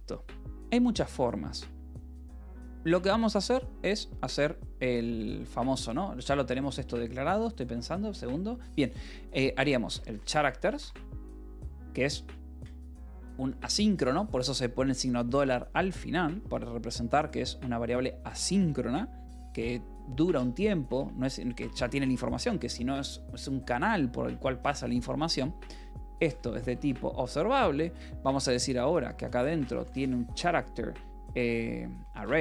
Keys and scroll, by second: 1.7 k, 2.5 o, 3.6-4.6 typing, 5.3 Escape, 5.8 l, 6.0 a, 6.6 BackSpace, 7.9 Tab, 9.5-12.9 typing, 20.8 space, 21.4 BackSpace, 21.9 space, 25.8-27.1 typing, 29.4-32.4 typing, 31.3 Return.